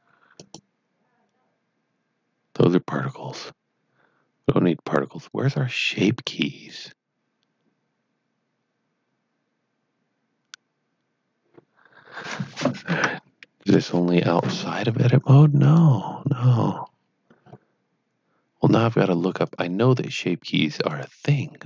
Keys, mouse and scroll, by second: 0.4 click, 12.8 Tab, 15.6 click, 16.5-17.0 scroll down 2, 17.3 scroll down 2, 19.4 click, 20.7 click.